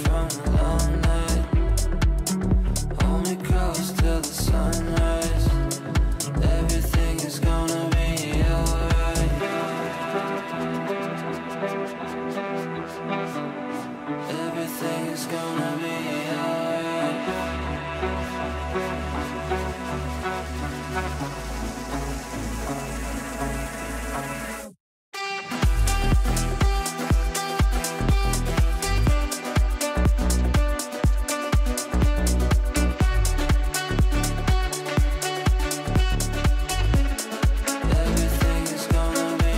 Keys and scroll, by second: 5.1 Delete, 13.7 Delete, 15.2 shift+Page_Up, 27.1 Right, 29.6 Up.